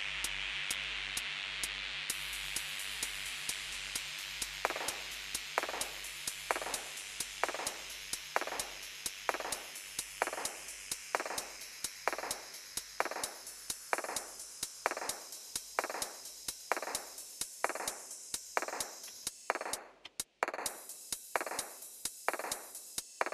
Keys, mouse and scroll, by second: 18.4 Down, 19.0 Up, 20.5 space, 21.8 typing.